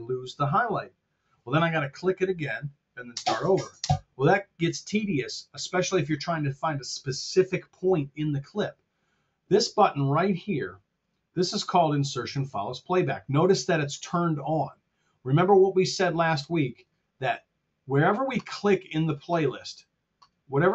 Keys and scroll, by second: 3.0 space.